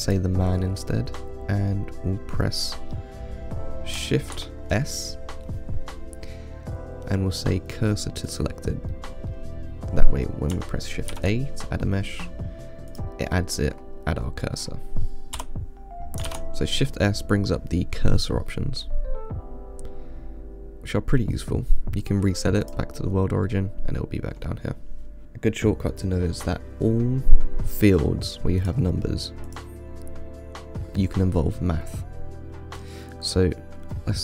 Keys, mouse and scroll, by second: 0.3 click, 4.6 shift+s, 9.2-9.6 middle drag, 9.6-11.4 scroll up 1, 11.4 shift+a, 13.6-14.0 middle drag, 14.0-14.5 scroll up 7, 14.9 scroll down 5, 15.6 Delete, 16.5 shift+s, 23.3 scroll down 2, 23.7-24.6 middle drag, 24.6 scroll up 2, 28.9 click.